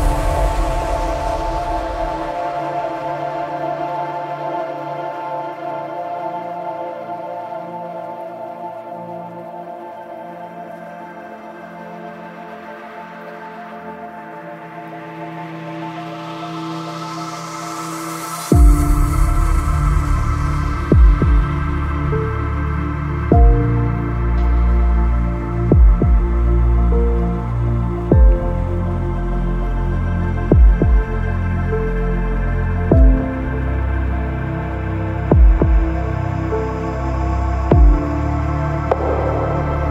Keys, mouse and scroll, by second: 0.0 shift+middle click, 0.4 shift+middle click, 1.9 middle click, 3.7 middle click, 4.2 click, 5.2 click, 5.5 click, 6.5 Up, 6.7 click, 6.8 click, 7.5 click, 7.8 click, 8.1 click, 9.3 click, 10.8 click, 13.6 click, 13.9 click, 14.3 click, 14.6 click, 14.9 Delete, 15.0 click, 15.9-17.9 drag, 17.9 middle click, 20.1-21.7 drag, 22.2 ctrl+click, 23.4 click, 24.7 click, 25.2 click, 25.2 KP_0, 25.8 click, 26.3 click, 27.1 click, 27.5 middle click, 27.7 click, 28.8 KP_0, 29.1 middle click, 29.3 middle click, 29.5 click, 30.5 click, 31.4 click, 34.6 click, 35.1 shift+middle click, 35.3 right click, 36.2 click, 37.6 shift+click, 38.5 click, 38.8 click, 38.8 KP_Decimal, 39.0 KP_Decimal, 39.2 KP_0, 39.4 click, 39.6 KP_0, 39.6 click.